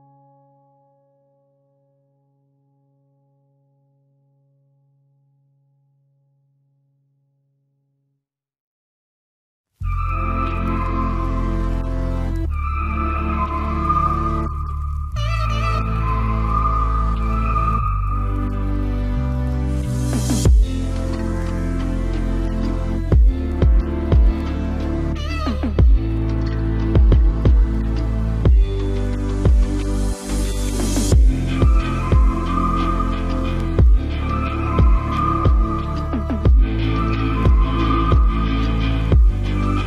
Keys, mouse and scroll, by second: 0.0 z, 0.2 middle click, 1.0 Tab, 1.8-3.4 drag, 3.4 right click, 4.2-10.7 right drag, 9.6 e, 10.9 z, 11.2 middle click, 12.2 click, 13.2 KP_Decimal, 14.0 s, 15.1 s, 17.5 ctrl+b, 18.8 KP_3, 19.0 ctrl+s, 19.6 Tab, 20.4 z, 23.1 Tab, 24.7 c, 26.6-29.7 right drag, 27.0 c, 29.2 c, 29.7 middle click.